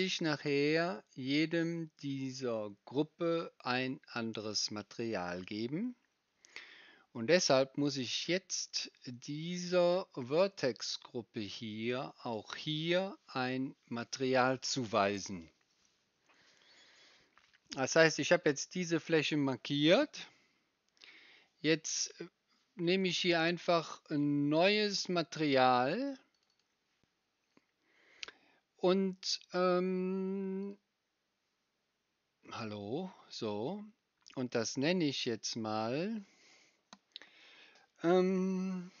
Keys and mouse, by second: 13.9 click, 25.1-26.4 drag, 26.5 click, 32.6-39.0 drag.